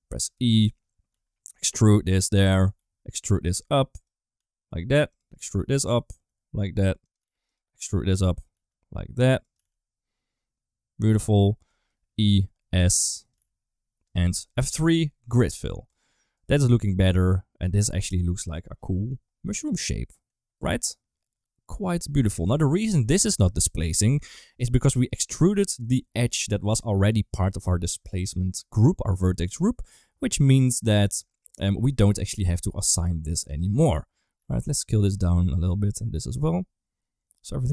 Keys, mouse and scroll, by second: 0.1 e, 2.4 e, 4.2 s, 5.2 e, 6.0 s, 7.1 g, 7.6 e, 8.4 s, 11.6 middle click, 12.0 e, 13.2 g, 14.4 F3, 15.7 Tab, 16.2-18.4 middle drag, 19.6 middle click, 20.6-21.8 middle drag, 22.1 shift+middle click, 22.4 middle drag, 22.8 shift+middle drag, 23.3 d, 23.4 click, 24.0 ctrl+z, 24.2 shift+middle click, 24.6 middle click, 24.8 Tab, 25.2 2, 25.6 middle click, 26.2 click, 29.3 middle click, 30.2 middle click, 30.8 shift+middle click, 31.1 middle click, 32.1 click, 32.6 click, 32.8 click, 33.1 middle click, 33.4 shift+middle click, 33.7 middle click, 34.3 s, 35.5 click, 36.0 s.